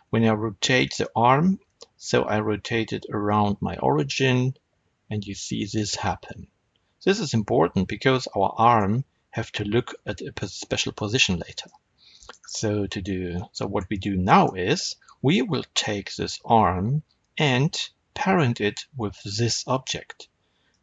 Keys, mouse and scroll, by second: 0.7 r, 8.7 right click, 10.2-10.8 scroll down 2, 10.8-19.0 middle drag, 11.7-12.0 scroll up 2, 12.3 shift+scroll up 2, 13.6-14.1 scroll up 2, 19.0 click, 20.6 click.